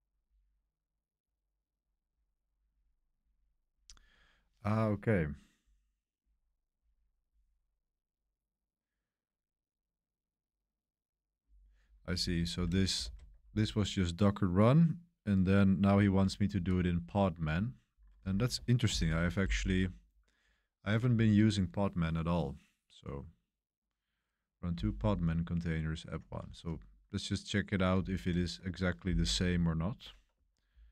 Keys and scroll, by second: 13.0 super+3, 16.0 super+1, 16.3 super+1, 18.8 ctrl+l, 20.0 ctrl+l, 28.2 super+3.